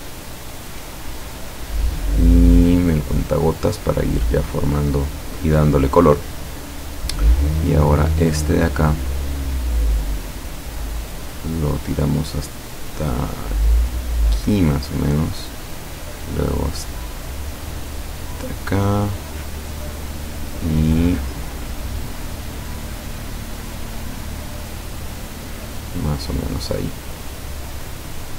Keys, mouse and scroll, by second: 0.3 click, 3.1 click, 3.6 click, 5.6 click, 9.3 click, 10.5-11.5 drag, 14.5 click, 18.4 click, 20.1-21.6 drag, 23.7 click, 25.0 click, 27.3 click, 27.7 click.